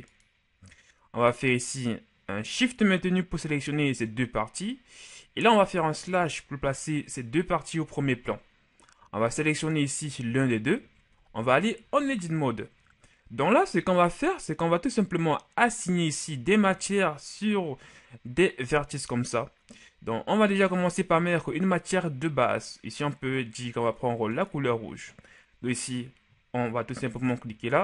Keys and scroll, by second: 6.1 KP_Divide, 11.8 ctrl+shift+Tab.